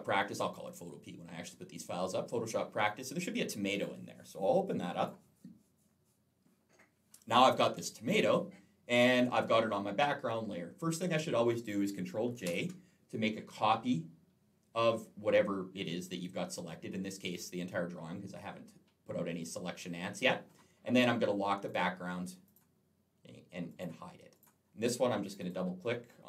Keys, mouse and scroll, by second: 3.6 click, 4.8 click, 12.3 ctrl+j, 21.5 click, 22.3 click, 23.5 click, 24.1 click, 25.1 click, 25.3 click.